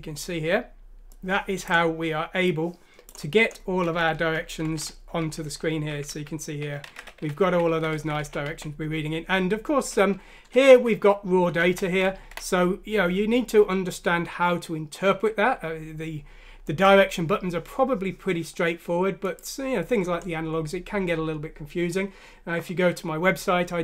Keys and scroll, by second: 6.7-9.0 typing, 12.1 Left, 12.2 Right.